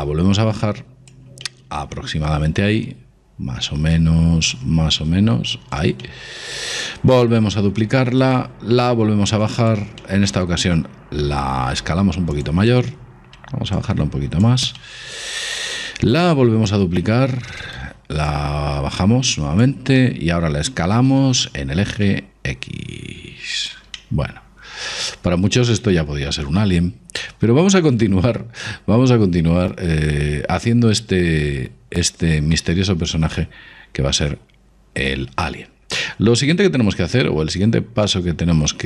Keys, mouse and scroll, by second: 1.5-3.3 middle drag, 4.6-6.4 drag, 6.1-7.8 middle drag, 7.3 shift+d, 8.9-10.8 drag, 10.0-12.3 middle drag, 11.3 s, 12.7-14.4 middle drag, 13.8-15.5 drag, 14.9-16.6 middle drag, 17.1 shift+d, 18.3-20.2 drag, 20.2-21.9 middle drag, 21.1 s, 24.0-25.9 middle drag, 32.6-38.8 middle drag.